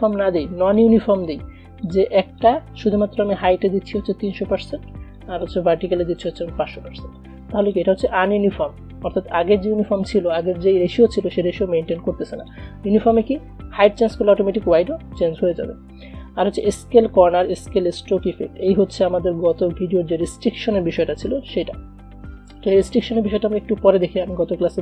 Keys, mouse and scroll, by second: 0.0 click, 5.2 click, 7.8 click, 12.5 click.